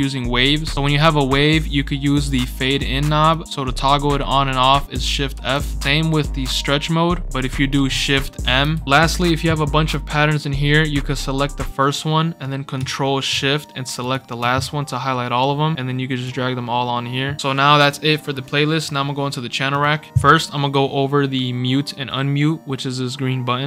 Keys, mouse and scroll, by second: 2.0-3.3 drag, 5.3 shift+f, 7.2 click, 8.4 shift+m, 14.0 ctrl+shift+click, 14.5 scroll up 2, 14.8 scroll down 2, 15.7-16.2 drag, 15.8 scroll down 2, 16.7 scroll up 2, 16.9 scroll down 2, 19.7 click, 20.2 scroll down 2, 21.9 scroll up 2.